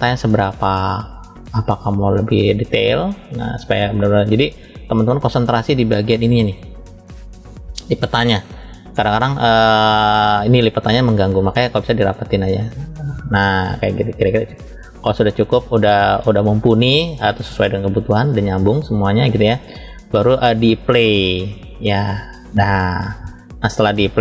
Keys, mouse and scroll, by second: 1.4-4.5 drag, 5.1-5.8 middle drag, 6.7 scroll up 1, 8.3-16.9 drag, 17.8-18.4 scroll down 1, 18.4-19.6 middle drag, 21.5-22.9 drag.